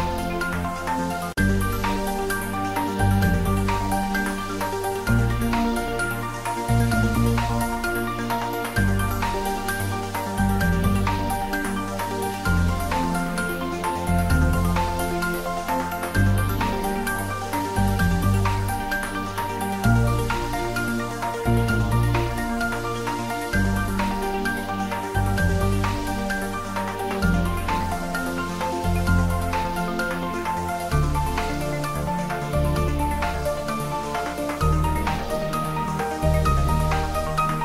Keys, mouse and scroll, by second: 1.8 click, 2.1 e, 2.6 click, 2.6 s, 5.9 click, 6.7 i, 8.2 click, 8.2-9.2 typing, 11.1 click, 11.2 Tab, 11.5-12.8 middle drag, 12.8 ctrl+middle click, 13.8 ctrl+3, 14.6 ctrl+middle click, 15.4 Tab, 16.1 ctrl+r, 17.0 click, 17.7 ctrl+z, 19.0 Tab, 19.3 click, 21.4 click, 21.8 shift+click, 28.1 ctrl+z, 29.1 ctrl+z, 29.6 shift+click, 32.3-35.8 drag, 35.8 Tab, 36.4 ctrl+3.